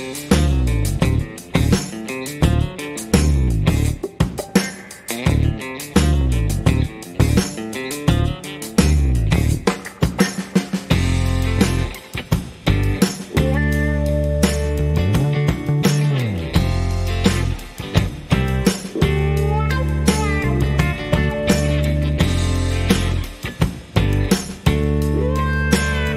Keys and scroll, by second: 6.0 shift+a, 8.1 g, 10.8 s, 10.9 x, 14.6 s, 14.7 x, 16.7 g, 16.8 x.